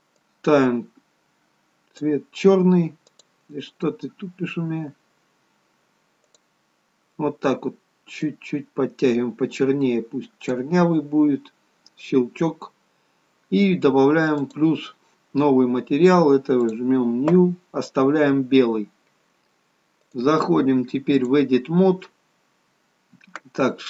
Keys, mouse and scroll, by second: 4.5 click, 6.3 click, 14.3 click, 16.6 click, 20.1 click.